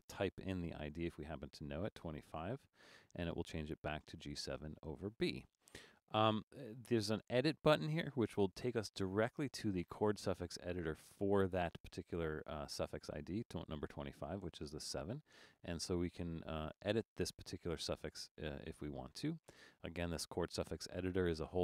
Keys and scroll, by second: 0.4-1.5 typing.